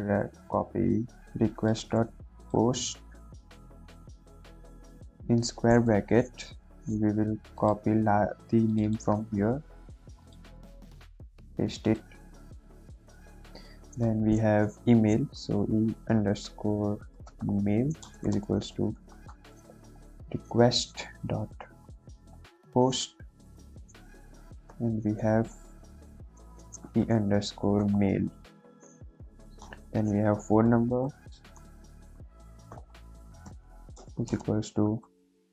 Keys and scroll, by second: 1.9 ctrl+c, 2.6 ctrl+v, 4.4 [, 4.8 ], 5.8 Left, 6.5 ', 9.3 ctrl+c, 11.2 ctrl+v, 13.1 shift+Return, 15.5-20.0 typing, 21.7-23.4 typing, 24.6 ', 26.7-28.6 typing, 28.9 Right, 29.2 Right, 29.5 Return, 30.6-35.5 typing.